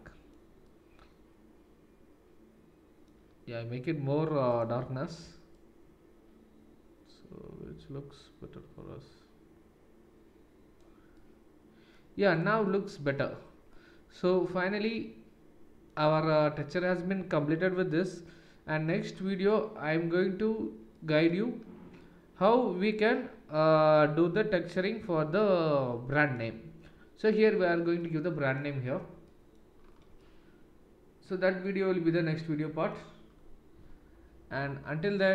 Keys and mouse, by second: 4.5-12.5 drag, 12.5-35.3 middle drag.